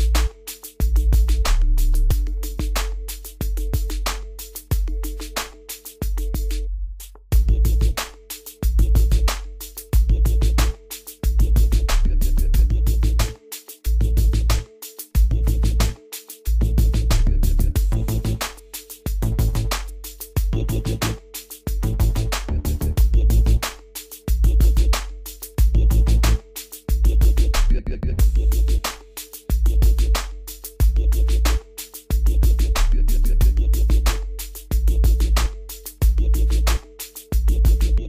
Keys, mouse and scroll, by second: 1.2 click, 2.9 Escape, 3.5 scroll up 1, 5.8 right click, 7.3 click, 7.7-8.3 scroll up 1, 8.5-8.9 scroll down 1, 13.5 click, 14.0 scroll down 1, 14.5-14.9 scroll, 14.9-16.4 scroll down 1, 16.4 click, 16.9 scroll up 1, 17.1-17.6 scroll down 1, 17.6 scroll up 1, 17.7 scroll, 17.9 scroll down 1, 19.2 click, 19.7 scroll up 1, 20.1-21.1 scroll down 1, 21.1 Escape, 21.8-29.3 drag.